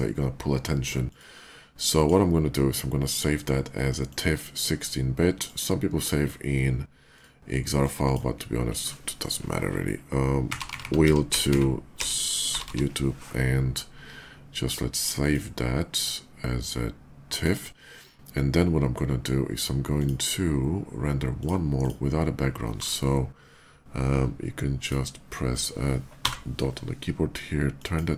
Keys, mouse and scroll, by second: 1.0 click, 1.8 click, 3.9 click, 4.2 click, 5.1 click, 6.9 click, 7.5 click, 10.4-12.4 typing, 15.0 click, 17.0 click, 19.6 click, 21.0 click, 21.6 click, 24.5 click, 26.1 Delete, 27.6 click.